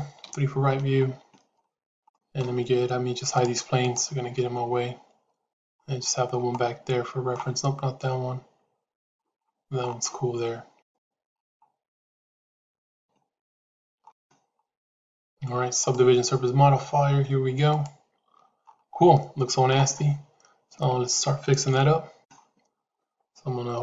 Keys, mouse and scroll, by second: 0.1 KP_3, 2.0 shift+middle click, 5.4 click, 6.4 middle click, 12.8 KP_3, 15.7-17.9 drag, 19.0 shift+middle click, 20.7 Tab, 21.6 KP_3.